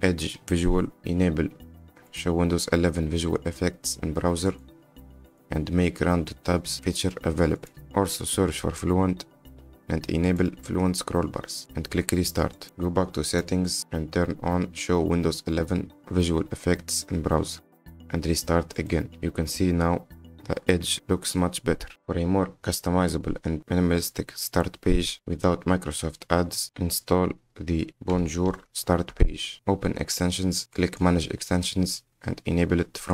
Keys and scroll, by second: 6.5 BackSpace, 21.9 r, 23.4 Return.